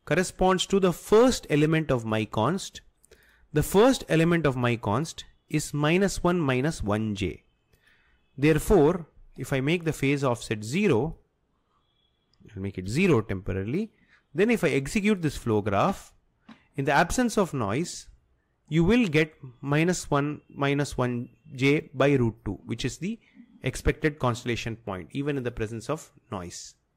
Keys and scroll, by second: 12.9 0, 13.1 0.